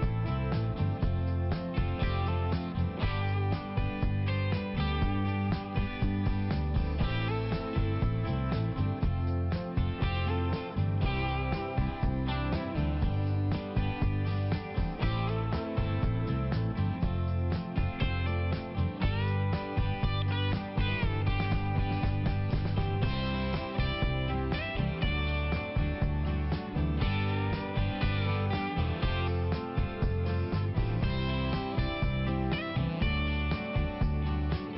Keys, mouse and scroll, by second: 0.3 click, 0.7 click, 1.1 click, 1.2 click, 1.5 click, 1.7 double click, 2.0 double click, 2.1 double click, 2.4 double click, 2.5 double click, 2.9 double click, 3.8 click, 3.9 click, 4.2 click, 4.5 click, 4.6 click, 4.9 click, 5.0 double click, 5.2 double click, 5.3 double click, 5.6 double click, 5.8 double click, 5.9 click, 6.1 click, 6.3 click, 6.4 double click, 6.8 double click, 7.1 click, 7.3 click, 7.5 click, 7.5 double click, 7.6 double click, 7.8 double click, 7.9 double click, 8.1 double click, 8.5 double click, 10.0 click, 10.4 click, 10.8 click, 10.9 click, 11.4 click, 11.8 click, 12.2 click, 13.0 click, 13.3 click, 13.5 click, 13.6 double click, 13.9 double click, 14.0 double click, 14.1 double click, 14.6 click, 14.6 click, 14.7 click, 14.8 double click, 15.0 double click, 15.2 double click, 15.4 double click, 15.5 double click, 15.7 double click, 15.8 double click, 16.2 double click, 19.3 click, 21.0 click, 21.4 click, 21.5 click, 21.7 click, 21.9 double click, 22.0 double click, 22.2 double click, 22.3 double click, 22.7 click, 22.9 click, 23.2 click, 23.3 double click, 23.4 double click, 23.6 double click, 23.8 double click, 24.0 double click, 24.1 double click, 25.7 click, 25.8 click, 26.0 click, 26.5 click, 26.6 click, 26.7 click, 27.1 click, 27.6 click, 27.8 click, 28.0 click, 28.1 double click, 28.6 double click, 30.1 click, 30.7 click, 31.1 click, 31.5 double click, 31.6 double click, 31.9 double click, 32.0 double click, 32.2 double click, 32.4 double click, 32.9 click, 34.2 click, 34.3 click, 34.7 click.